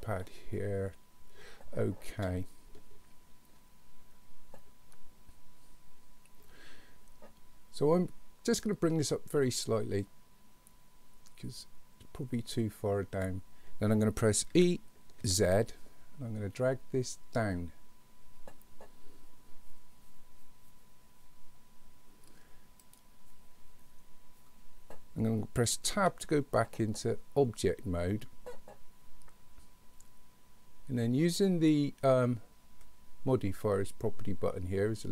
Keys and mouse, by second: 8.8-13.2 drag, 14.6 e, 26.0 Tab.